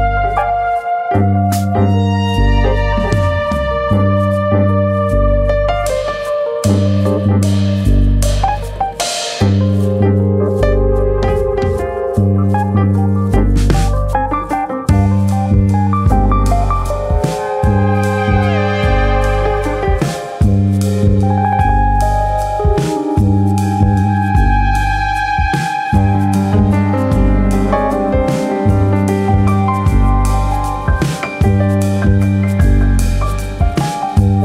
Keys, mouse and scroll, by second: 0.5 g, 1.5 click, 1.8 middle click, 2.2 alt+click, 2.9 g, 3.7 click, 4.9 3, 5.1 click, 5.5 shift+click, 6.3 g, 9.2 click, 9.3-11.6 scroll down 12, 9.6 middle click, 9.9 Tab, 10.8 click, 11.3 middle click, 11.7-12.2 scroll up 8, 12.2 middle click, 12.9 scroll up 1, 13.4 click, 13.7 Tab, 13.9 middle click, 14.7-15.2 scroll up 2, 14.9 middle click, 15.2 Tab, 15.5 click, 15.9 Tab, 16.7 KP_3, 17.8 click, 18.3 shift+middle click, 19.2 click, 20.7 click, 22.5 r, 23.1 click, 23.3 s, 24.2 click, 25.1 1, 25.5 click, 26.3 click, 27.5 click, 28.0 click, 30.2 Tab, 30.5 click, 30.7 Tab, 31.4 click, 32.4 click, 34.2 click, 34.2 e.